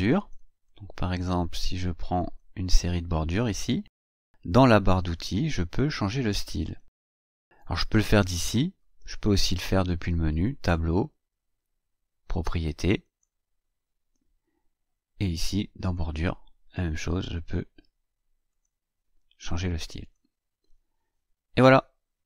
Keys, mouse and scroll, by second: 0.5-2.4 drag, 5.0 click, 6.5 click, 10.2 click, 12.9 click, 15.7 click, 17.2 click, 18.3 click, 19.9 click.